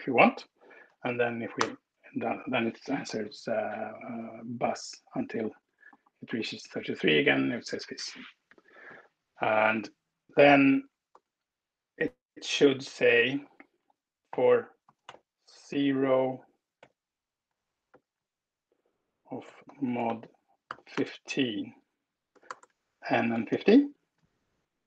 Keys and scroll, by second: 1.5 alt+Return, 7.0 alt+Return, 7.5 Escape, 10.7 Up, 11.1 Return, 11.7 shift+Up, 13.0 super+Right, 14.0-15.4 typing, 16.4-21.1 typing, 22.2 BackSpace, 23.0 n, 23.0 space, 23.4 1, 24.2 ctrl+alt+Down.